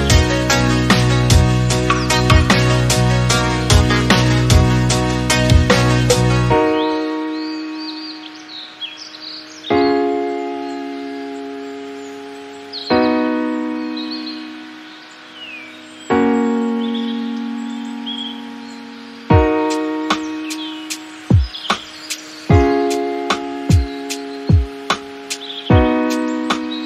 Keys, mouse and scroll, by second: 1.2 Tab, 1.3 scroll down 4, 2.0 click, 2.2-3.2 middle drag, 3.2 scroll down 1, 3.5-4.3 shift+middle drag, 4.3 scroll down 1, 4.6-6.6 middle drag, 8.5-10.3 right drag, 10.3-13.2 drag, 13.2 n, 13.9 click, 14.3 KP_Decimal, 15.0-16.1 middle drag, 16.1 click, 17.6-18.3 middle drag, 18.3-18.8 scroll up 3, 18.8 click, 19.4 KP_Decimal, 19.9-21.2 middle drag, 21.2-24.3 drag.